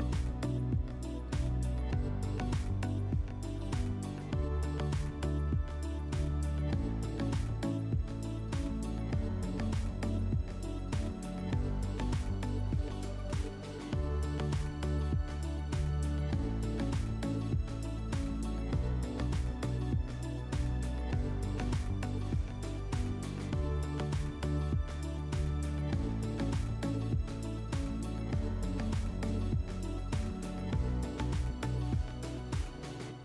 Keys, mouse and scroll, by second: 0.3 click, 2.0-3.4 drag, 4.0 click, 4.9 typing, 7.3 click, 8.6 click, 9.3 shift+click, 10.4 click, 11.3 click, 12.0 click, 12.2 click, 17.0 click, 19.3 click, 19.9 click, 20.1 click, 20.9 click, 22.1 click, 22.7 click, 23.9 click, 24.9 click, 26.5 click, 27.1 click, 27.8 click, 29.2 click, 30.2 click, 30.3 click, 31.2 typing, 32.7 click.